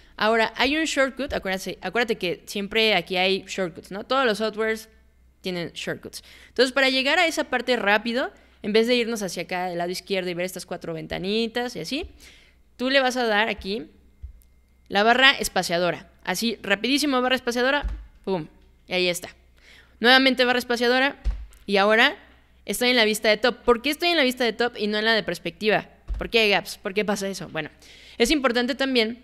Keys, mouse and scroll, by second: 0.6 click, 1.3 click, 11.1 click, 12.0 click, 13.6 click, 14.2 click, 17.8 space, 18.7 click, 21.2 space, 26.1 space.